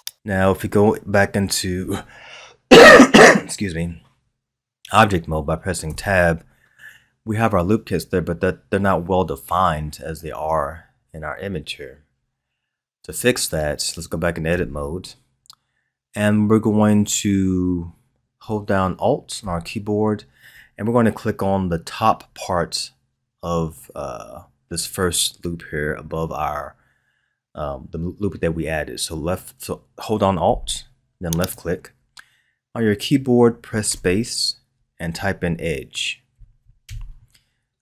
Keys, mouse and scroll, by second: 5.9 Tab, 14.5 Tab, 31.3 alt+click, 33.8 space.